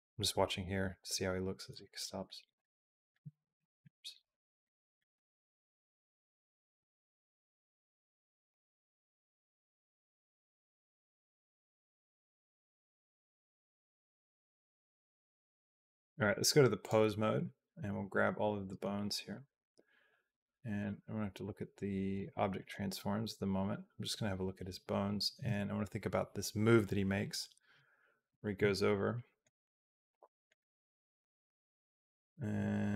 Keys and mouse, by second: 0.8 click, 1.9 alt+click, 2.4 alt+click, 4.4 middle click, 5.3 shift+middle click, 6.9 shift+middle click, 8.5-15.9 drag, 16.6 click, 17.8 a, 20.6 click, 20.6 a, 21.9 click, 22.4 click, 28.7 alt+middle click, 29.9 super+middle click, 31.2 click.